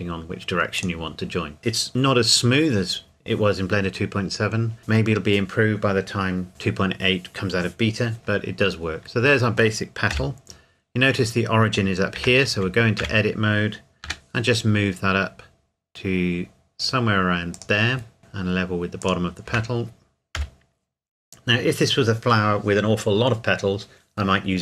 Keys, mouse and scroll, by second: 0.8 click, 8.7-9.0 scroll down 1, 9.0 middle click, 10.1 KP_7, 12.2 Tab, 12.5 a, 13.0 a, 14.0 g, 17.5 click, 18.2 g, 19.0 click, 19.5 Tab, 20.4 KP_7.